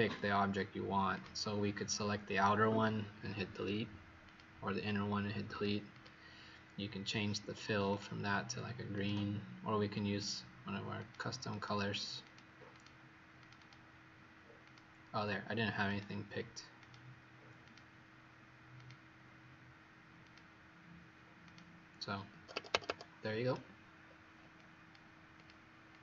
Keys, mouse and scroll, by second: 5.8 click, 7.8 click, 11.5 click, 12.1 click, 12.7 click, 13.3 click, 13.5 click, 14.6 click, 22.2 Escape, 22.5 Escape, 22.6 Escape, 22.8 Escape, 24.0-24.5 alt+scroll down 1, 24.5 click, 25.9 click.